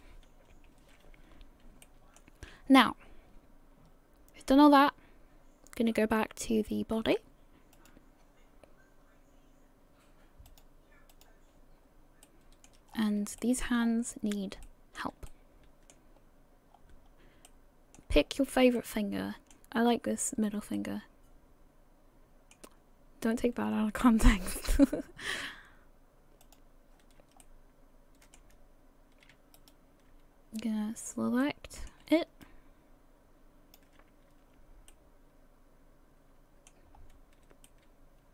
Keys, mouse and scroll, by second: 0.5 KP_1, 1.8 shift+middle click, 4.6 click, 7.7 click, 11.2 click, 11.8 scroll down 2, 12.2 middle click, 12.9-13.3 scroll up 5, 13.4 shift+middle click, 13.8-14.2 scroll up 3, 14.2 scroll down 2, 14.6 middle click, 15.3 shift+middle click, 16.2 scroll up 1, 16.7-17.3 scroll down 2, 17.5 middle click, 18.3-18.6 scroll up 1, 18.8 shift+middle click, 19.8 scroll up 1, 20.7 middle click, 24.1 shift+middle click, 26.4 click, 27.4 shift+middle click, 29.6 alt+right click, 30.3 scroll down 1, 31.4 middle click, 32.4 shift+click, 34.5 scroll down 1, 34.9 middle click, 37.0 scroll up 2, 37.7 shift+middle click.